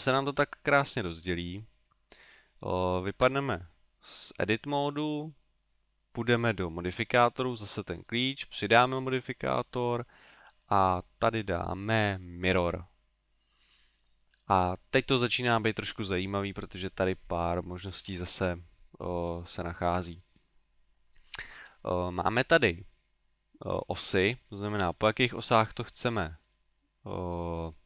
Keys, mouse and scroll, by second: 0.4 middle click, 3.2 Tab, 6.4 click, 8.0 click, 14.0 middle click, 24.4 click, 24.9 click.